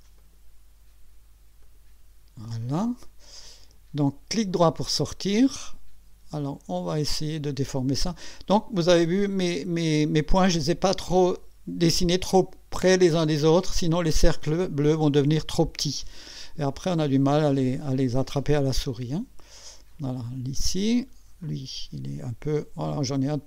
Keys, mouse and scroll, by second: 0.2 click, 1.6 click, 4.6 right click, 7.5-8.7 drag, 19.6-20.7 drag, 21.4-23.2 drag.